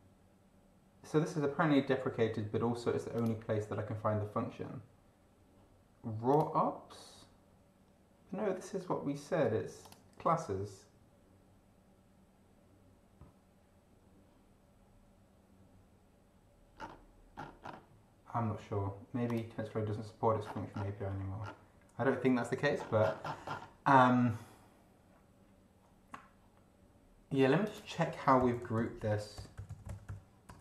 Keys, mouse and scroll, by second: 3.2 click, 6.3 click, 9.8 click, 16.8 scroll down 2, 17.3-17.9 scroll up 2, 19.3 click, 20.4-21.0 scroll down 2, 21.4 scroll down 2, 22.8-23.5 scroll up 2, 23.5 scroll up 1, 27.6 click, 28.1-30.6 typing.